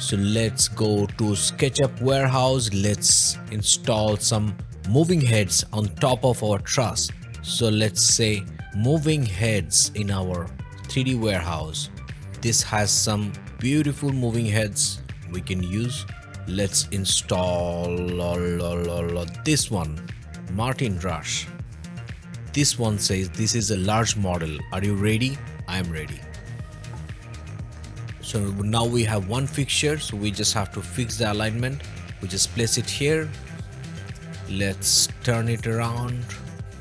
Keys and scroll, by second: 8.4-9.9 typing, 10.0 Return, 34.2 o.